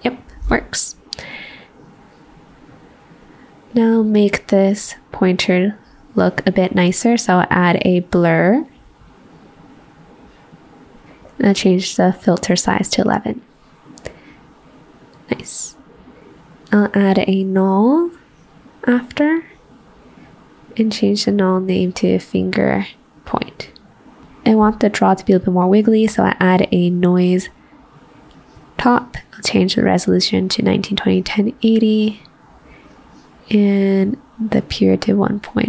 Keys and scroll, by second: 22.5 typing.